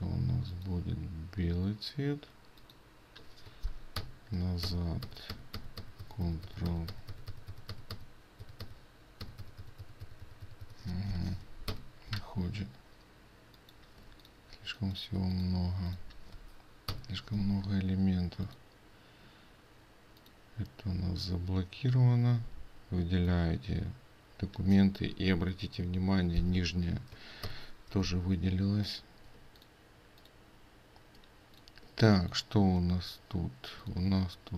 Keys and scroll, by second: 14.1 ctrl+space, 29.4 ctrl+space.